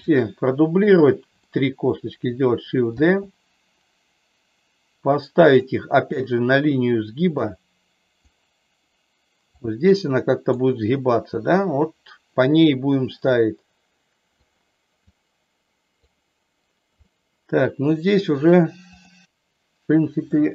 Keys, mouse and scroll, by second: 1.4 shift+middle click, 2.9 shift+d, 5.4 click, 7.4 click, 9.5-10.5 drag, 13.3-14.4 drag, 15.0 click, 17.1 middle click, 20.3 middle click.